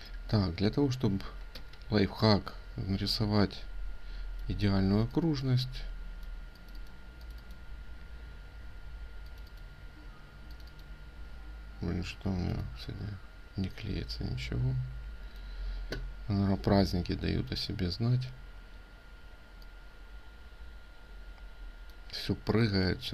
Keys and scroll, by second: 1.5 ctrl+r.